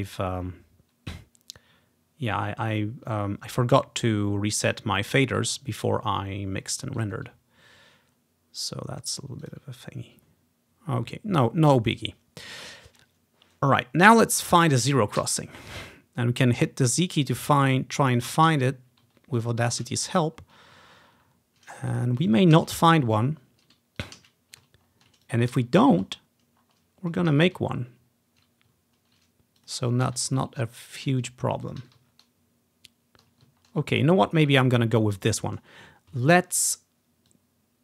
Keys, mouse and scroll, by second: 0.5-0.9 ctrl+scroll down 1, 1.5 ctrl+scroll up 1, 2.1 ctrl+scroll up 1, 4.8 click, 5.4-7.2 drag, 8.2-8.8 ctrl+scroll up 1, 8.8-9.3 ctrl+scroll down 1, 9.3 ctrl+scroll down 1, 9.5 click, 10.2-10.8 ctrl+scroll up 1, 14.6 click, 15.0 click, 15.3 z, 16.1-17.0 ctrl+scroll up 1, 17.8-18.1 ctrl+scroll down 1, 18.3 click, 18.6 z, 19.9 z, 20.5-21.1 ctrl+scroll up 2, 21.1-21.7 ctrl+scroll down 2, 22.7 z, 23.0 ctrl+scroll up 1, 24.1 click, 24.3 z, 24.9-25.3 ctrl+scroll down 1, 25.3 click, 25.6 z, 26.1-26.6 scroll up 1, 26.7 scroll down 1, 27.2 click, 27.5 z, 27.8 ctrl+scroll up 1, 29.1 ctrl+scroll down 1, 29.7 click, 30.1 z, 30.8 ctrl+scroll down 1, 31.9 z, 32.2 ctrl+scroll up 1, 33.7-34.3 ctrl+scroll down 1, 34.3-35.3 ctrl+scroll up 1, 37.4 click.